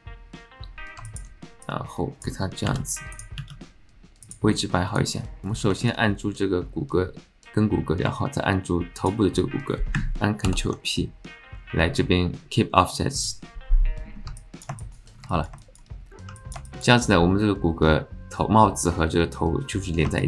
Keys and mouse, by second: 1.1 alt+shift+click, 1.7 click, 2.7 r, 3.4 s, 4.9 click, 5.8 alt+shift+click, 10.4 ctrl+p, 14.4 click, 14.8 shift+click, 15.3 alt+click, 15.6 shift+click, 16.3 click, 16.5 alt+middle click, 16.7 alt+shift+middle click, 20.2 shift+click.